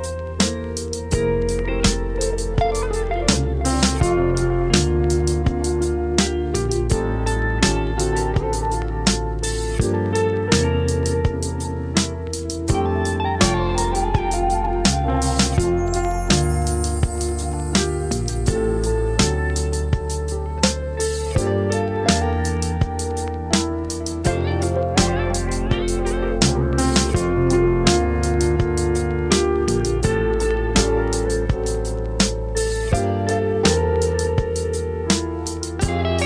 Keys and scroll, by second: 6.7 v, 24.6 w, 27.2 super+i, 27.4 super+v, 28.2 v, 29.0 super+t, 29.5 shift+super+t, 34.2 super+t.